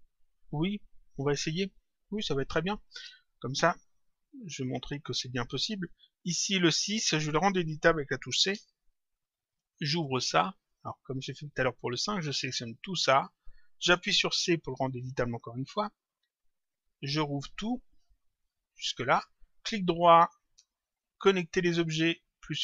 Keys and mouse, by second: 2.6 click, 4.4 click, 5.6 click, 9.9 click, 11.0 ctrl+click, 12.8 shift+click, 16.5 click, 17.2 ctrl+click, 18.8 shift+click, 19.5 right click.